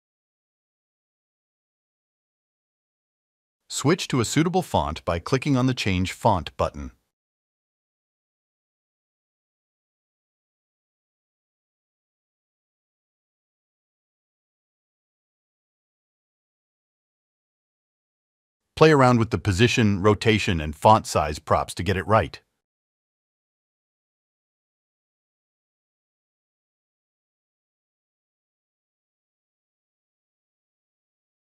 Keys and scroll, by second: 0.0-3.0 typing, 0.6 Return, 16.3 Up, 18.7 Return.